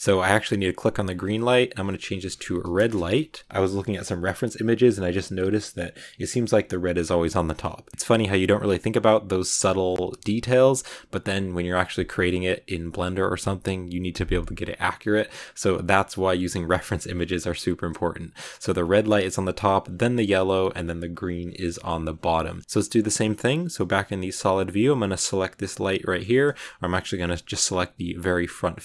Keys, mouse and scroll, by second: 0.2 click, 0.9 click, 1.0-3.5 drag, 7.9 shift+middle click, 8.0-8.8 scroll down 1, 8.8-9.7 scroll up 1, 10.6 click, 18.3 middle click, 18.8-19.3 scroll down 1, 21.6-22.6 middle drag, 22.6 scroll down 3, 22.8 z, 24.2-24.7 scroll up 3, 25.1 right click, 25.9 middle click, 26.5 scroll up 2.